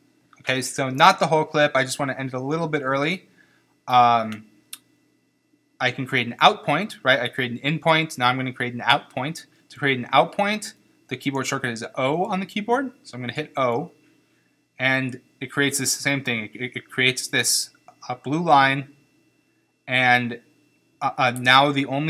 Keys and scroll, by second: 13.3 o.